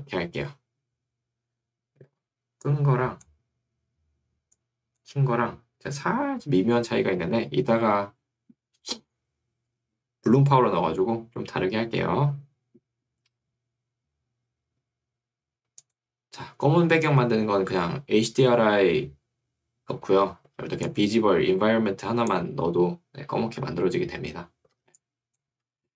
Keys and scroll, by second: 23.6 Escape, 25.6 Escape.